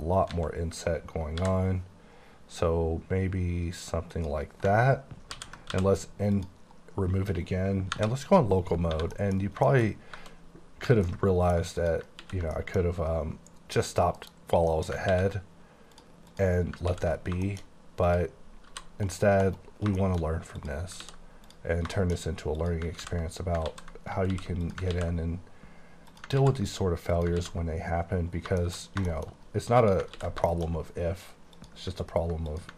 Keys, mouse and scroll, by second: 0.3 a, 1.4 i, 4.2 click, 5.7 x, 6.3 click, 7.2 scroll down 2, 7.9 KP_Divide, 8.7 scroll up 1, 8.9 1, 9.2 middle click, 9.9 shift+scroll up 3, 10.4-10.8 shift+scroll down 1, 11.0 ctrl+middle click, 11.8 click, 12.3 ctrl+x, 12.6 middle click, 13.7 click, 14.2 KP_Decimal, 14.7 middle click, 15.2 x, 15.9 click, 16.3 click, 16.9 x, 17.2 scroll down 4, 17.7 middle click, 18.0 click, 18.7 g, 19.5 right click, 20.0 shift+middle click, 20.5 click, 21.0 ctrl+x, 21.5 click, 22.0 shift+middle click, 22.5 click, 23.0 ctrl+x, 23.7 ctrl+z, 24.3 ctrl+x, 24.6 click, 24.9 x, 26.1 click, 26.4 ctrl+x, 27.1 click, 27.4 ctrl+x, 28.4-29.0 scroll down 6, 29.1 shift+middle click, 29.5-29.8 scroll up 2, 29.8 click, 30.2 ctrl+x, 30.5 shift+middle click, 30.7 shift+scroll up 5, 31.5 click, 32.5 click.